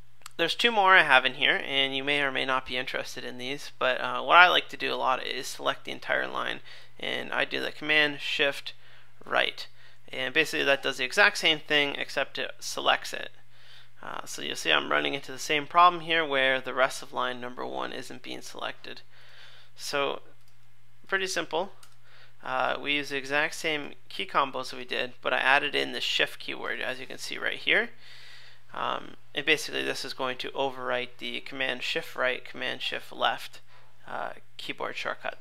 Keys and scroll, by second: 9.2 shift+super+Right, 21.8 super+/.